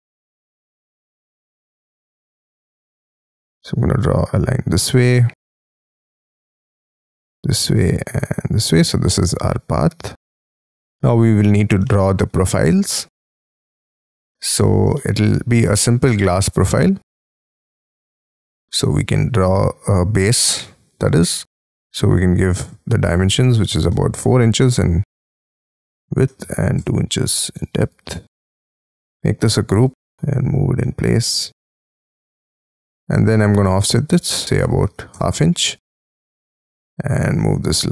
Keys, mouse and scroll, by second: 1.2-3.0 scroll up 16, 3.0-4.5 scroll up 12, 4.7-5.4 scroll down 16, 5.4 middle click, 5.9-7.5 scroll up 16, 7.5 scroll up 1, 8.7 space, 10.5 middle click, 10.7-11.5 scroll down 18, 11.8 shift+middle click, 12.5-14.0 scroll up 33, 14.0 r, 14.7 scroll up 3, 14.9 shift+middle click, 16.0-21.6 scroll up 10, 21.9 r, 23.6 4, 24.1 shift+', 25.2 ,, 26.0 2, 26.4 shift+', 26.7 Return, 27.5 space, 27.9 double click, 28.6 g, 29.2 m, 29.9 m, 31.7 shift+click, 32.0 space, 32.3 double click, 32.7 double click, 33.0 double click, 33.3 f, 34.4 1, 34.8 shift+', 35.1 Return, 35.6 space, 37.3 m.